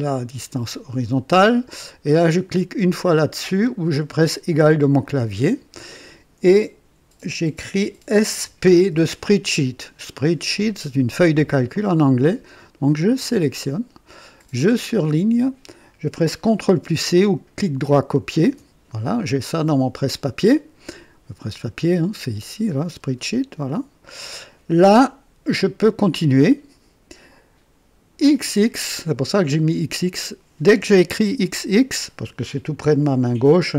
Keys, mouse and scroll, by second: 5.0 click, 8.2-8.8 typing, 13.1 click, 14.5 click, 18.4 ctrl+c, 22.2 click, 23.6 click, 25.9 click, 28.2 x, 28.7 x.